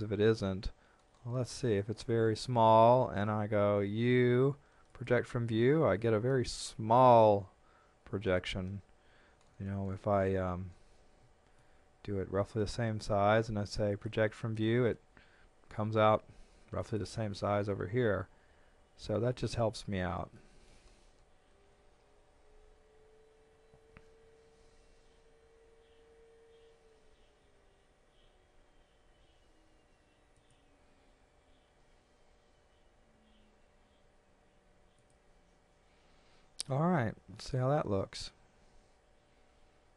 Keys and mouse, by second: 3.9 u, 4.9 click, 11.6 shift+middle click, 13.3 u, 16.8 click, 19.3 click, 20.4 shift+middle click, 23.7 s, 30.4 click, 31.8 g, 34.9 click, 38.0 middle click.